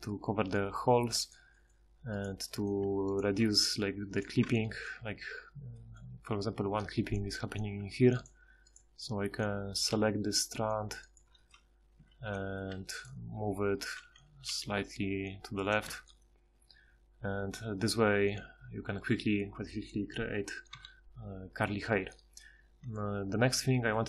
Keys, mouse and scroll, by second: 2.1 right click, 2.8 Tab, 4.5 Tab, 7.8 Tab, 9.0 4, 9.9 g, 12.0 c, 12.6 c, 14.5 g, 15.9 Tab, 20.7 KP_Divide, 23.6 a.